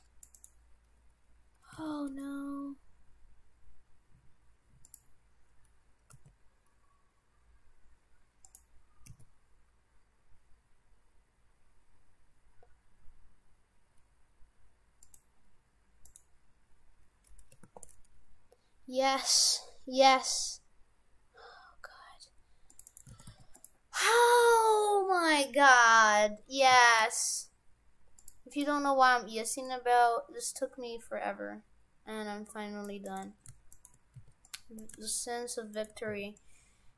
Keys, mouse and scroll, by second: 1.7 s, 6.1 g, 9.1 s, 16.1 right click, 17.6 ctrl+r, 23.1 shift+f, 25.4 click, 26.1 d, 26.7 c, 33.8 shift+right click, 34.2 c, 35.8 shift+right click, 36.1 c.